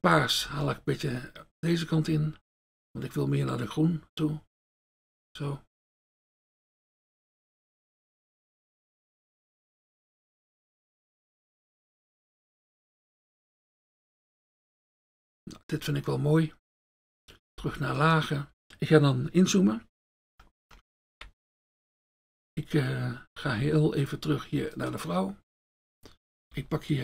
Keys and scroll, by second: 0.5 F1, 18.5 F1, 18.6 ctrl+z, 23.5 F1, 25.5 F1.